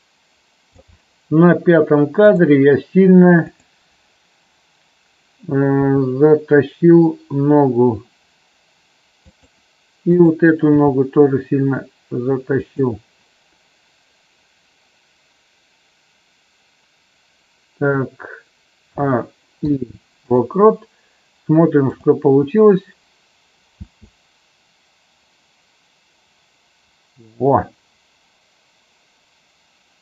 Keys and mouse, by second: 2.3 click, 3.4 click, 5.8 g, 9.1 click, 10.1 click, 10.8 g, 12.7 click, 18.8 a, 19.5 i, 21.8 click, 23.8 space.